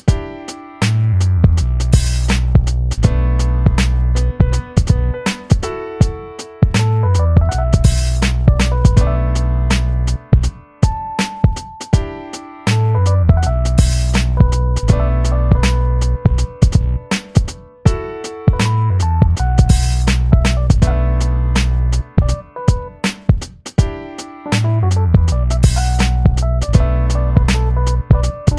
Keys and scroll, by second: 6.3 ctrl+d, 21.3 p.